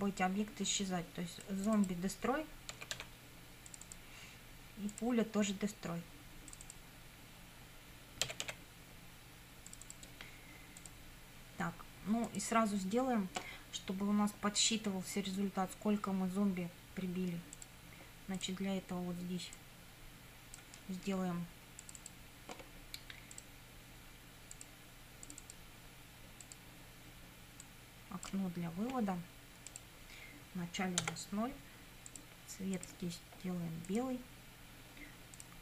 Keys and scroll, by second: 2.6-3.5 typing, 8.0-9.0 typing, 31.0 0.